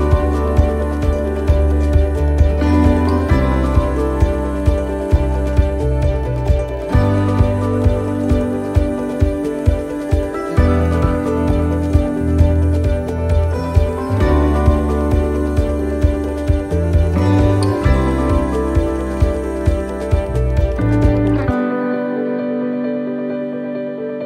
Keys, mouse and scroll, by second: 0.0 scroll up 1, 1.8 ctrl+r, 4.6 s, 8.4 ctrl+r, 12.5 ctrl+r, 15.8 shift+middle click, 16.4 scroll up 1, 16.9 shift+middle click, 17.6 scroll down 1, 19.4 click, 20.5 right click, 23.6-24.2 shift+right click.